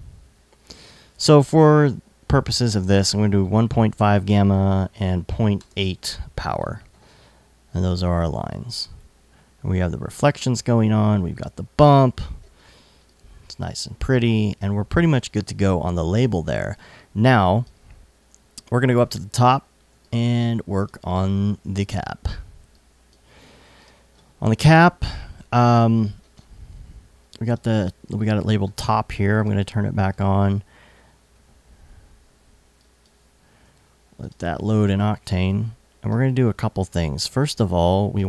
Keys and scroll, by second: 0.5 super+a, 1.7-2.6 typing, 4.5-5.5 typing, 11.9 alt+super+s, 18.0 alt+i, 22.2 l, 32.2 l, 37.3 i.